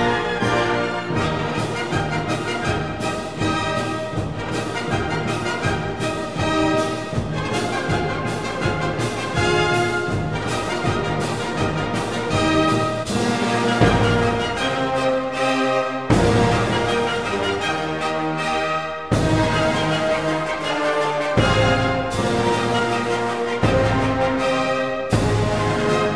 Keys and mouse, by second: 0.6 click, 2.1 Tab, 4.5 Tab, 5.9 ctrl+r, 7.4 click, 7.7 ctrl+r, 10.1 click, 10.5 ctrl+r, 12.9 click, 13.4 ctrl+r, 15.1 click, 17.2 ctrl+r, 19.6 click, 19.9 ctrl+r.